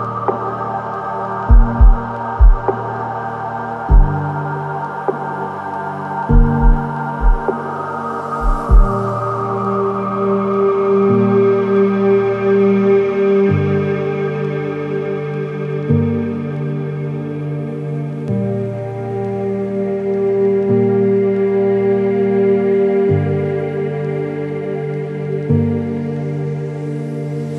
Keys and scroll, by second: 21.0 ctrl+t.